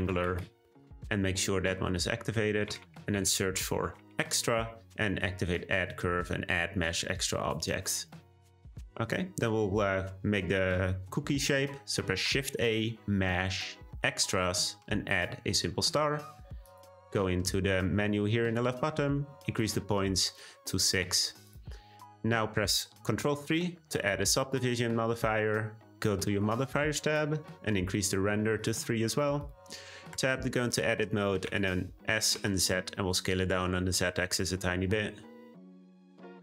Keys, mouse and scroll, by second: 9.0-9.4 drag, 9.4-10.3 middle drag, 10.3-12.1 scroll up 2, 12.1 shift+a, 16.6-20.3 drag, 20.3-21.0 scroll up 2, 21.0-21.5 scroll up 2, 21.5-23.2 drag, 23.2 ctrl+3, 24.0-26.4 middle drag, 26.4 click, 28.5 click, 29.4 click, 30.1 Tab, 31.4 s.